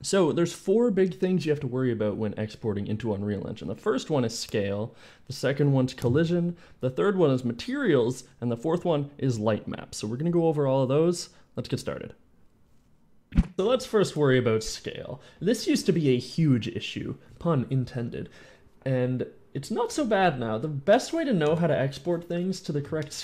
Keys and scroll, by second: 0.1 d, 0.5 d, 22.0 End.